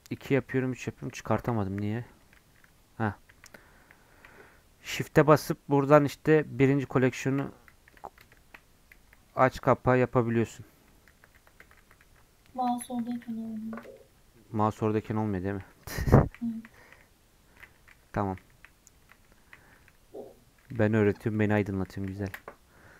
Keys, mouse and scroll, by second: 0.0-0.6 typing, 2.3 shift+1, 2.4 shift+1, 2.6 shift+2, 4.1 shift+1, 6.6 shift+1, 7.6 shift+2, 8.3 shift+1, 10.6-13.0 typing, 14.5-19.8 typing, 21.3 shift+1, 21.8 shift+2.